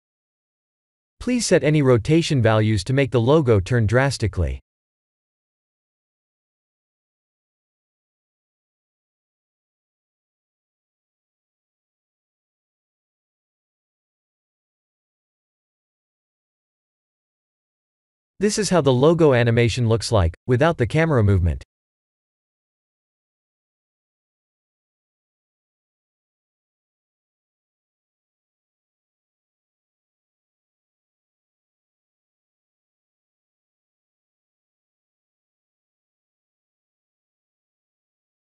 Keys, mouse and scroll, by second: 2.9 click, 6.5 click, 14.8 click, 17.4 middle click, 17.8 middle click, 20.2 click, 24.0 click.